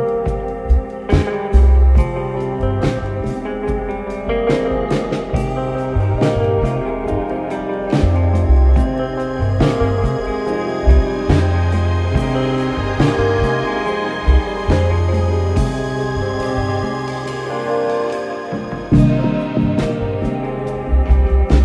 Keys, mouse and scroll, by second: 2.0-3.3 scroll, 3.3 KP_3, 5.6 click, 6.4 Tab, 7.4 click, 9.1 click, 9.7 KP_1, 11.5 ctrl+KP_1, 12.1 scroll, 12.4-13.3 scroll up 5, 13.3 click, 13.6-14.8 drag, 15.0 scroll, 16.8-17.2 scroll down 1, 18.1 click, 19.9 Tab, 21.2 click.